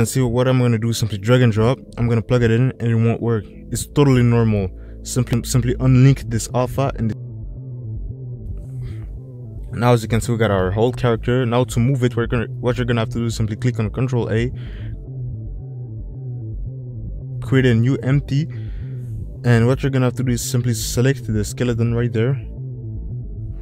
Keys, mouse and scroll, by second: 12.3 n, 14.5 shift+a, 19.8 middle click, 21.5 click, 23.3 ctrl+shift+z.